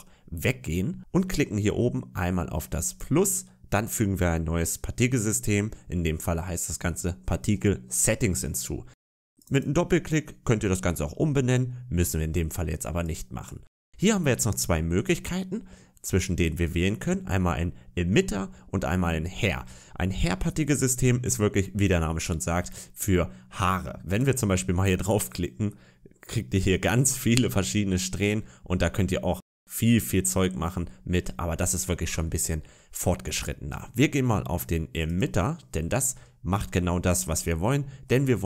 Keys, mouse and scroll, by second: 2.7 click, 9.2 click, 9.4 click, 24.0 click, 25.1 middle click, 32.1 middle click, 34.9 click, 36.3-36.9 scroll down 2, 36.8 middle click, 37.2-37.6 scroll up 3, 37.6 middle click, 38.3 scroll down 1.